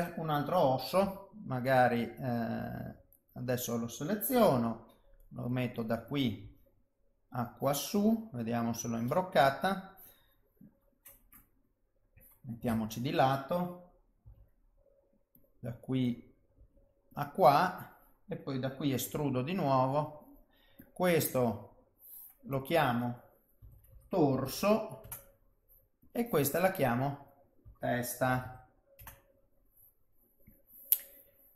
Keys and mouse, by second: 1.0 g, 3.3 click, 4.5 g, 6.1 click, 6.4 g, 7.8 middle click, 9.7 click, 12.6 KP_3, 14.2 g, 16.0 click, 16.5 g, 19.1 e, 20.8 click, 21.2 middle click, 22.5 click, 26.0 click, 26.8 click, 30.1 middle click, 31.3 middle click.